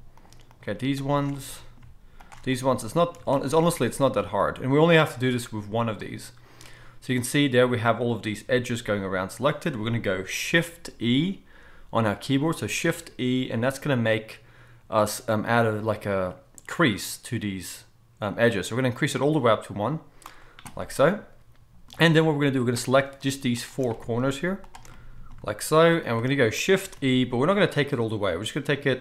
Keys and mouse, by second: 2.2 alt+shift+click, 3.8-13.2 middle drag, 12.8 shift+e, 13.2-21.1 right drag, 21.1-24.8 middle drag, 24.8-26.1 right drag, 26.1 shift+middle click, 26.2-29.0 shift+right drag, 27.0 shift+e.